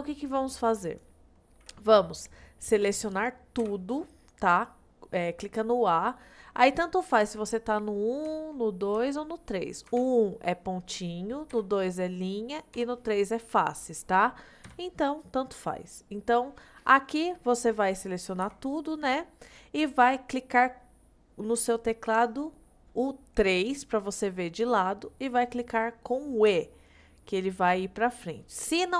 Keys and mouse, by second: 0.9 click, 3.7 a, 7.3 1, 8.3 2, 9.0 3, 10.0 1, 11.6 2, 12.8 3, 14.8 1, 16.0 middle click, 17.9 middle click, 18.5 a, 19.2 middle click, 23.4 KP_3, 26.5 e.